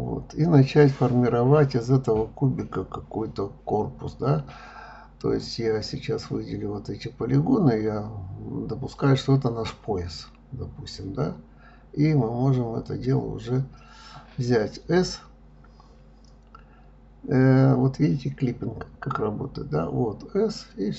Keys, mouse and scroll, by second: 0.6 click, 1.1-2.6 middle drag, 2.6 click, 4.3 click, 4.9 click, 5.3 click, 5.9 shift+click, 6.2 shift+click, 6.5 shift+click, 6.9 shift+click, 7.2 middle click, 8.0 shift+click, 8.3 shift+click, 8.7-11.1 middle drag, 15.0 s, 17.2 click, 18.2 s.